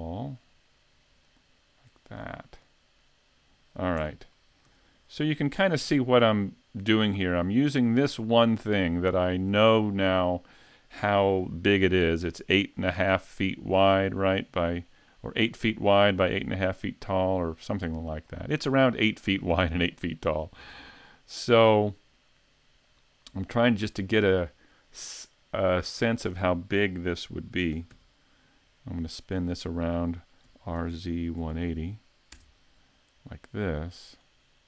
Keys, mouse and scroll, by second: 1.1 click, 3.4-4.0 scroll down 2, 4.0 Tab, 4.3 middle click, 4.7 a, 5.1-5.4 scroll up 2, 5.4 middle click, 8.0-8.4 scroll up 2, 12.9 middle click, 15.0 middle click, 15.7 middle click, 19.6 middle click, 20.3 shift+middle click, 20.9 scroll down 1, 21.7 middle click, 23.3 right click, 23.7 scroll down 2, 24.1 middle click, 27.6 shift+d, 29.3 click, 30.5 r, 34.1 click.